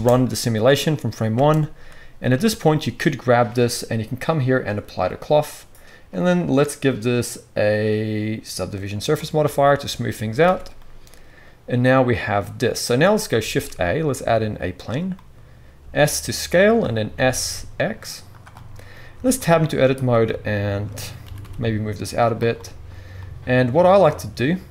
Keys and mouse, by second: 1.3 space, 2.4-4.4 drag, 10.4 alt+a, 13.5 shift+a, 15.8 s, 16.6 click, 16.6 middle click, 16.6 right click, 17.1 s, 17.3-19.9 drag, 19.1 Tab, 19.9 middle click, 20.0 shift+click, 20.5 shift+middle click, 20.7-24.7 drag, 21.2 g.